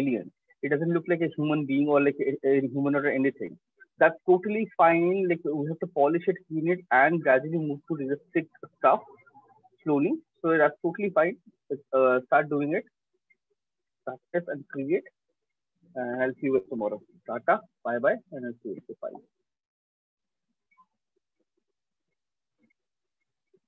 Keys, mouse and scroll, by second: 18.3 click.